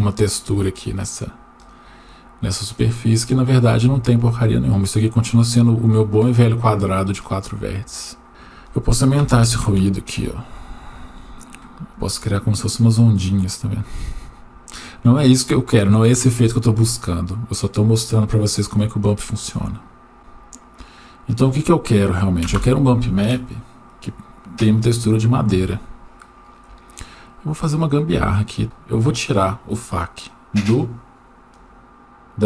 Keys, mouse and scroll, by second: 1.6 right click, 3.2-6.1 right drag, 8.3-9.7 drag, 20.6 click, 22.5 Delete, 25.0-25.4 scroll down 1, 25.7 shift+middle click, 27.5 click, 28.1-28.6 drag, 31.5 click.